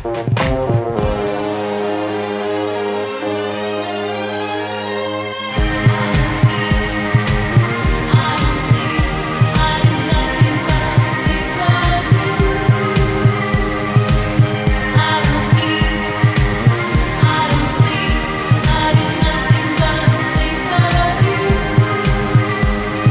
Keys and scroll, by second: 1.9 ctrl+z, 11.9 space, 21.7 ctrl+z.